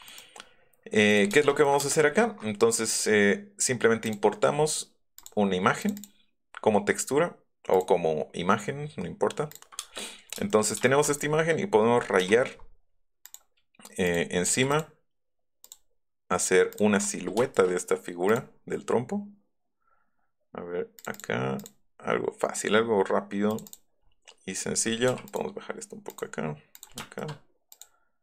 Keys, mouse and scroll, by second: 0.0 right click, 1.1 click, 1.8 space, 4.0 click, 5.2 click, 5.8 click, 6.0 click, 7.7 click, 9.5 click, 9.9 middle click, 12.2 l, 13.2 click, 14.0 click, 14.5 a, 14.7 click, 15.6 click, 16.7 click, 17.5 shift+click, 18.2 click, 21.0 click, 21.1 click, 21.6 click, 23.5 click, 23.6 click, 26.7 click, 27.0 shift+middle click, 27.7 click.